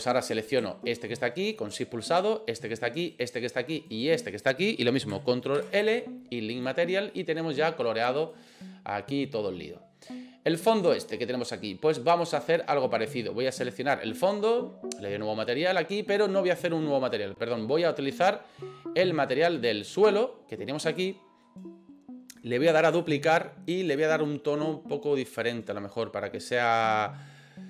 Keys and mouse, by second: 0.3 right click, 2.1 shift+right click, 3.0 shift+right click, 3.8 shift+right click, 5.6 ctrl+l, 8.2 right click, 10.9 right click, 12.4-20.0 drag, 22.8 click, 23.9 click.